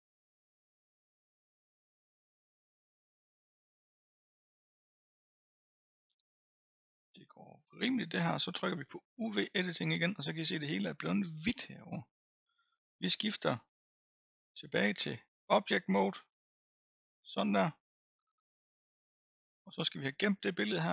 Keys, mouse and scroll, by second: 9.4 click, 15.4-18.4 drag.